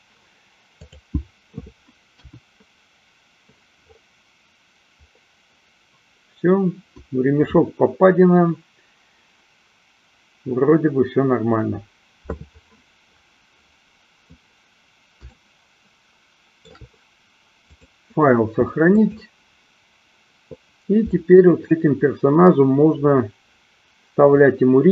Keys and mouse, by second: 0.8 click, 2.1 KP_1, 15.2-16.8 shift+middle drag, 17.6-21.6 drag.